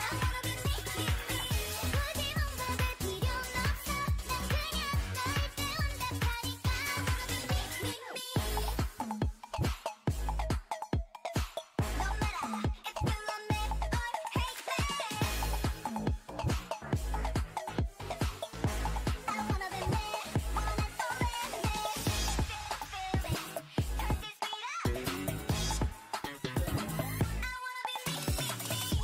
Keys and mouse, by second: 1.7-3.3 right drag, 1.8 g, 3.9 ctrl+z, 4.3 o, 4.7 g, 6.6 middle click, 7.1 right click, 7.2 g, 7.4-9.0 drag, 8.5 a, 10.3 ctrl+r, 11.1 a, 11.3 k, 14.5 k, 16.1 right click, 16.6 x, 17.6 middle click, 18.2-19.6 drag, 18.4 g, 19.6 right click, 19.8 Tab, 20.8 Tab, 22.6-24.2 drag, 23.0 o, 23.7 e.